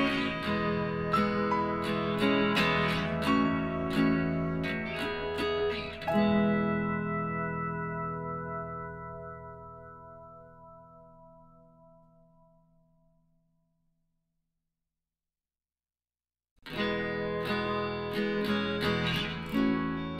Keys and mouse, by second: 1.9 middle click, 2.7-4.0 right drag, 3.1 s, 5.5 Tab, 5.8 middle click, 6.1 a, 7.1 middle click, 7.3 middle click, 11.3 Tab, 11.4-12.9 middle drag, 12.9-14.8 drag, 13.6-16.0 right drag, 15.4 g, 19.3 g.